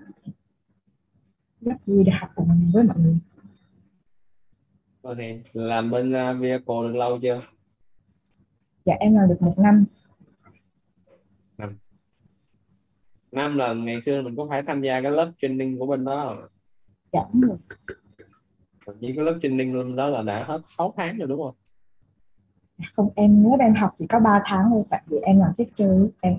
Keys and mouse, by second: 0.6-4.2 typing, 7.3-10.6 typing, 11.5 Left, 15.6 space, 17.3-19.4 typing, 20.9 BackSpace, 22.7-24.4 typing.